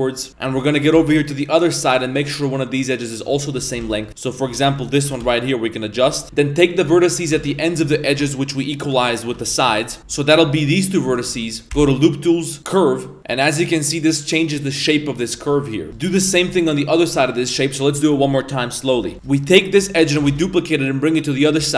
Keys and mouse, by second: 0.3 2, 1.0 shift+d, 3.4 shift+middle click, 3.8-5.1 typing, 4.8 right click, 6.2 shift+g, 7.4 ctrl+z, 8.0 shift+middle click, 9.1 middle click.